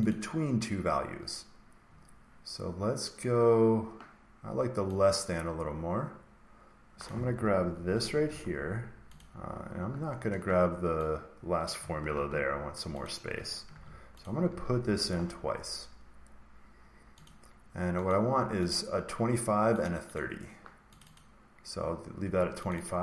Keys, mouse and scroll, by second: 0.0 click, 6.9 click, 7.8 ctrl+c, 9.1 click, 10.2 Escape, 11.6 click, 12.1 ctrl+c, 13.0 click, 13.7 ctrl+v, 14.2 click, 14.5 ctrl+v, 17.2 click, 18.0 click, 18.6 click, 19.7 click, 20.1 click, 20.9 click, 21.1 click, 22.1 Escape, 22.6 click, 22.8 click.